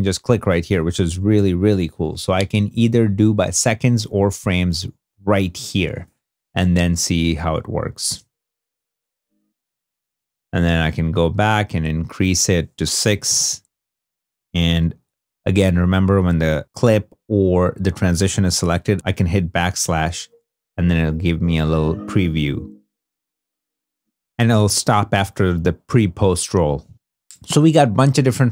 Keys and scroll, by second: 1.0 3, 1.2 Home, 8.0 space, 9.1 space, 12.9 6, 19.7 /.